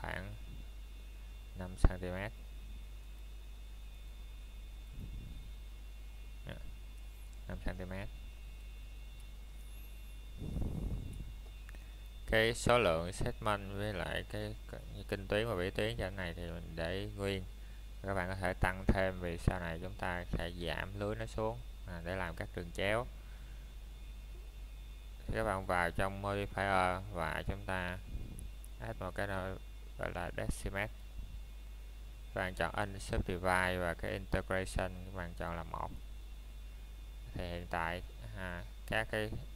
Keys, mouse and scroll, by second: 0.0 shift+middle click, 3.7 click, 9.0 KP_Enter, 12.8 click, 17.0 middle click, 17.5 scroll up 1, 18.5 middle click, 19.0 shift+middle click, 20.0 scroll up 1, 20.6 middle click, 21.1 shift+middle click, 27.7-28.5 scroll up 1, 28.5 middle click, 29.0 shift+middle click, 33.2 middle click, 38.1 click.